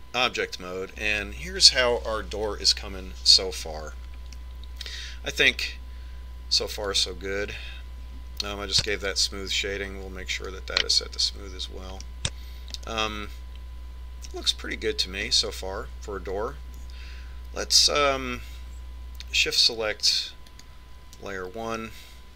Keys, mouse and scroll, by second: 2.2-4.0 middle drag, 6.2-8.0 middle drag, 8.7 click, 10.8 right click, 12.2 click, 14.0-15.6 middle drag, 16.3-18.8 scroll down 1, 18.8-19.2 scroll down 1.